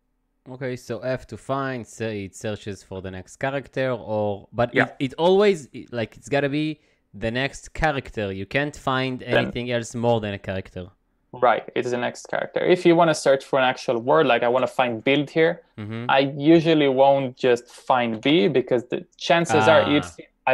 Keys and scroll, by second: 17.9-18.8 typing.